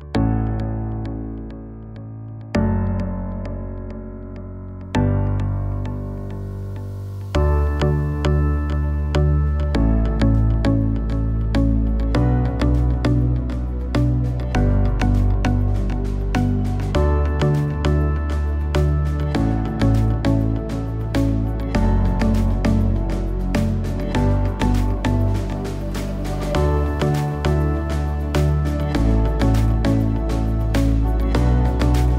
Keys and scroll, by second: 16.3 Down, 17.3 Up.